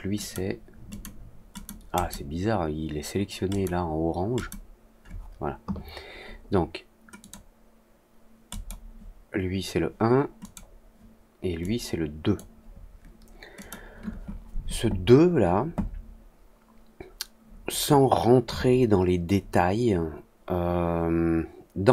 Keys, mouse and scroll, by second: 7.1 click, 8.4 click, 10.3 click, 11.5 click, 13.5 click, 19.9 middle click, 20.3 middle click, 21.8 click.